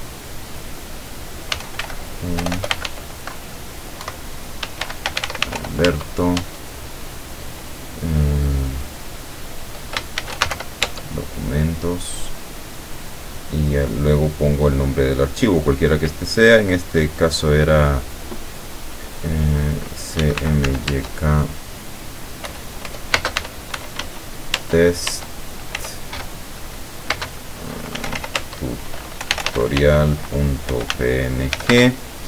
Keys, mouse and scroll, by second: 1.3-6.1 typing, 10.0-11.0 typing, 20.0-21.2 typing, 22.5-24.5 typing, 24.6 Tab, 27.2-31.7 typing.